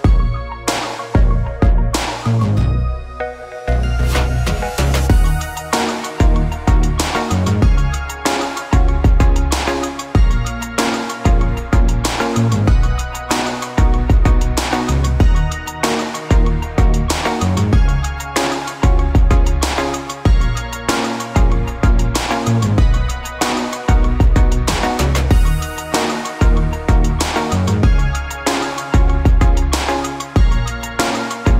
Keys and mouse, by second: 0.6 alt+z, 1.0 alt+z, 1.2 alt+z, 2.1 f, 2.3 middle click, 2.4-30.9 drag, 3.6 ctrl+z, 16.9 alt+z, 17.1 alt+z, 20.6 alt+z, 29.0 alt+z, 30.9-31.5 middle drag.